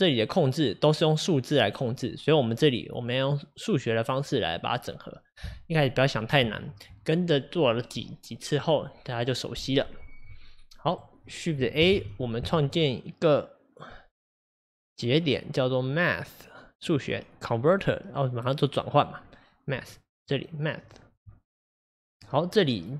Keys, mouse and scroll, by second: 0.0-22.1 drag, 22.2-22.9 drag.